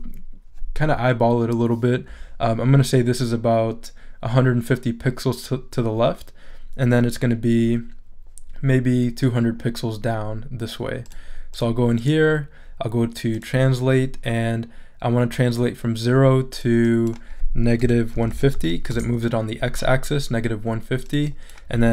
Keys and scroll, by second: 17.6-19.0 typing.